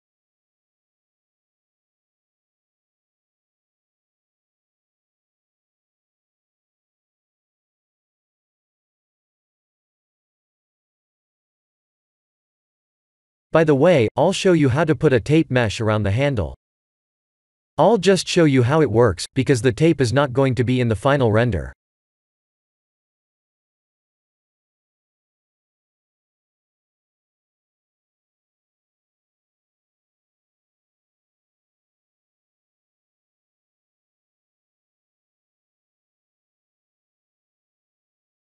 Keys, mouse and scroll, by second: 0.9 click, 3.2 b, 6.7 ctrl+j, 8.0 click, 9.9 KP_1, 10.4 KP_7, 10.9 KP_3, 11.8 r, 14.5 middle click, 15.1 middle click, 15.4 KP_1, 16.8 shift+middle click, 17.0 shift+middle click, 17.6 click, 19.0 shift+middle click, 19.2 shift+middle click, 20.3 shift+a, 24.1 r, 32.2-32.5 scroll up 3, 32.5 shift+middle click, 33.2-34.0 scroll up 2, 34.0-34.8 scroll up 1, 34.0 s, 35.1 s, 38.0 g.